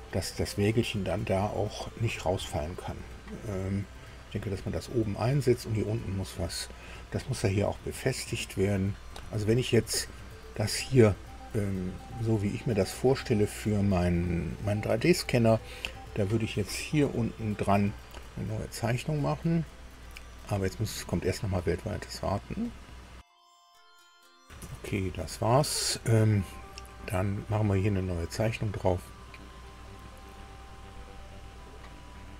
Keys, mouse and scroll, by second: 7.1-8.2 middle drag, 9.5-10.6 middle drag, 11.5 scroll up 1, 12.0 middle click, 16.6 click, 22.6 click, 23.9 alt+Tab, 24.6 alt+Tab, 29.8 click, 32.1 scroll down 1.